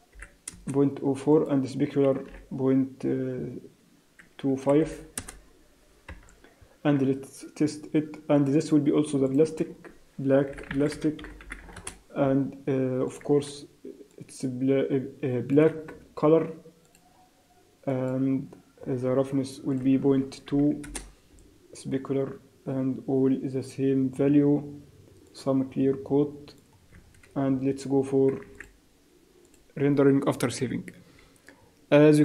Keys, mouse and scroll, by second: 1.3 click, 6.0 KP_0, 8.3 click, 9.2 click, 9.5 click, 13.0 click, 16.8 click, 18.7 scroll down 2, 19.7 click, 19.7 scroll down 3, 22.0-22.6 scroll down 1, 22.7 scroll down 1, 25.2 click, 28.5 ctrl+s, 29.6 click.